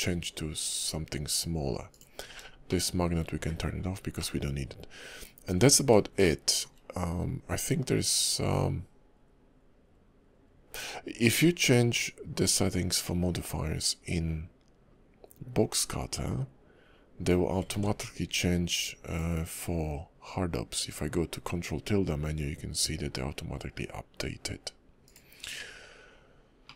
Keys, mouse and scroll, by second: 1.9 click, 2.6 shift+middle click, 4.2 middle click, 5.7 scroll up 1, 6.2 shift+middle click, 11.6 click, 17.7 ctrl+`, 26.6 middle click.